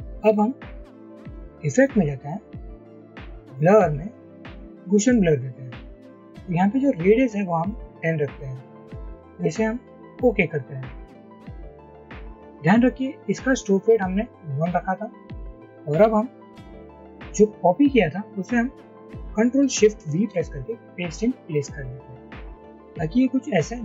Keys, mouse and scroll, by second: 20.2 ctrl+shift+v.